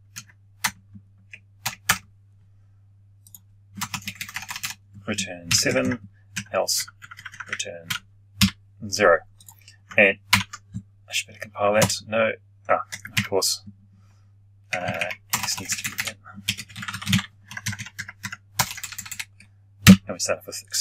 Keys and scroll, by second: 10.2 ctrl+F9.